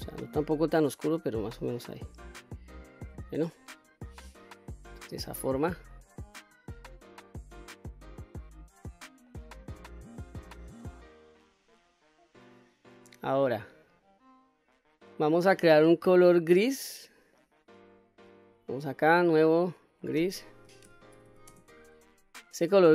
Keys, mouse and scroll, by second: 2.9-3.3 scroll down 1, 3.3-5.8 middle drag, 6.6 click, 9.0-9.3 scroll down 1, 9.3-9.9 middle drag, 10.4-10.7 scroll up 1, 10.7-11.3 middle drag, 11.6-11.9 scroll up 1, 11.9-12.7 scroll down 2, 12.7-14.3 scroll up 6, 17.0 middle click, 18.4 click, 19.2 click, 19.8-22.6 drag.